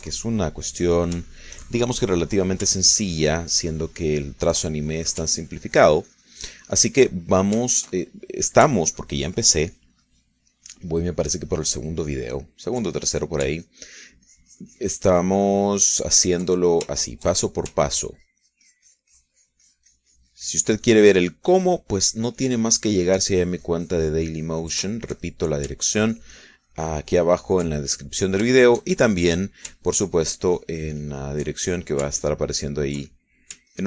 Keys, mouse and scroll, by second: 2.5 ctrl+shift+middle click, 3.3 middle click, 4.1-6.4 ctrl+drag, 6.6-8.8 ctrl+drag, 9.1 shift+middle click, 10.0-14.6 ctrl+shift+drag, 14.8-18.1 ctrl+drag, 18.1 ctrl+shift+middle click, 19.2-26.0 ctrl+drag, 26.2 ctrl+shift+middle click, 27.2-29.5 ctrl+shift+drag, 29.8-30.8 shift+middle drag, 31.2-33.3 ctrl+drag, 33.5-33.8 ctrl+drag.